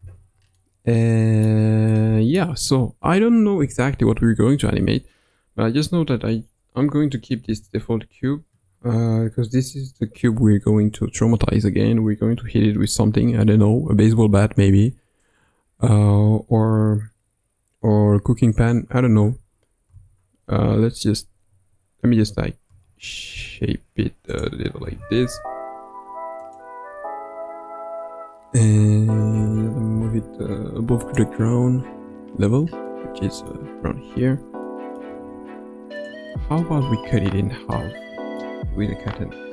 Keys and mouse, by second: 0.6-1.5 middle drag, 1.9-2.4 middle drag, 7.5 Tab, 19.9 s, 22.7 s, 24.8 s, 29.3 Tab, 29.9 g, 31.9 KP_Decimal, 32.6 KP_3, 32.9-33.5 middle drag, 34.6-35.0 middle drag, 35.1 g, 36.3-38.4 middle drag, 38.6 g.